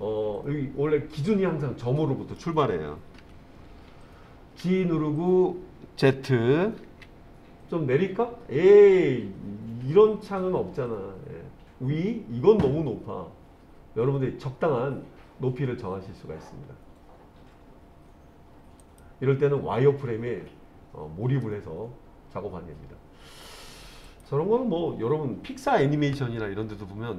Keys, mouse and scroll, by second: 3.2 KP_3, 4.7 g, 7.0 z, 18.9-21.5 drag, 21.5-23.8 middle drag, 24.1 click.